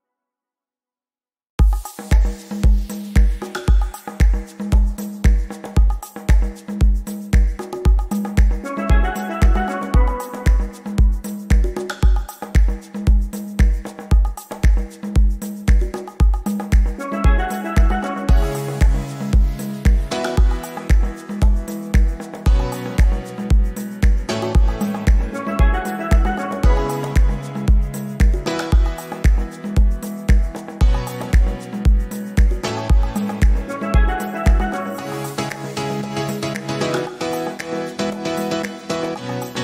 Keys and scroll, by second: 20.4 Delete.